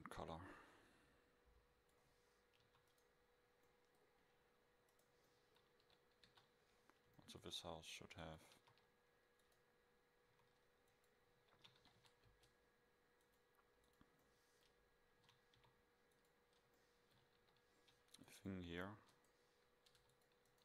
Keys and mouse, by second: 2.4 middle drag, 2.7 a, 3.0 click, 3.7-5.0 middle drag, 5.0-5.3 right drag, 5.9 KP_7, 6.3 KP_5, 8.6 shift+a, 10.3 s, 11.5 r, 13.3-14.3 drag, 15.2 s, 16.8 middle click, 17.0 middle drag, 17.4 KP_7, 18.6-19.2 middle drag, 20.0 Delete.